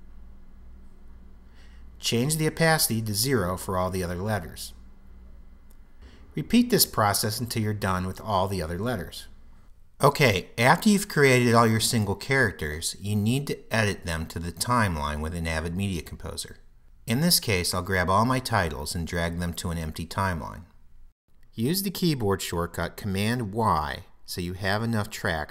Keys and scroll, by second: 22.0 super+y.